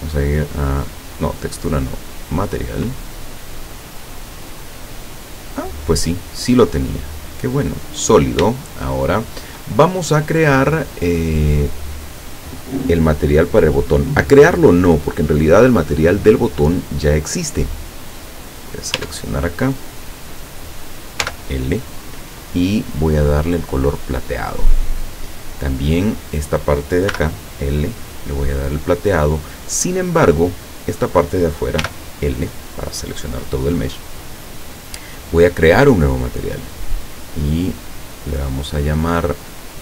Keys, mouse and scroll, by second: 0.2 click, 1.4 click, 2.2 click, 4.6-5.2 scroll down 1, 5.2-5.6 scroll up 1, 6.8 click, 7.6 click, 8.6-9.7 shift+middle drag, 10.7 scroll down 2, 18.5 right click, 19.0 Tab, 20.4 right click, 21.3 l, 22.8 click, 24.8 click, 26.3 right click, 27.2 l, 28.7 click, 29.3 scroll up 1, 30.4 right click, 31.8 l, 35.8 click, 37.9 click, 39.2 click.